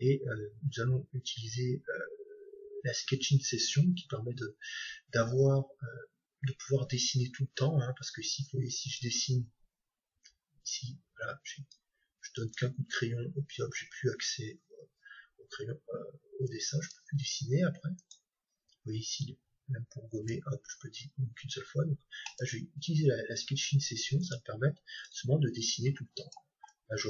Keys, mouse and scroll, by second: 8.8-10.7 drag, 16.4-19.8 drag, 22.2-24.1 drag, 24.2-26.0 drag.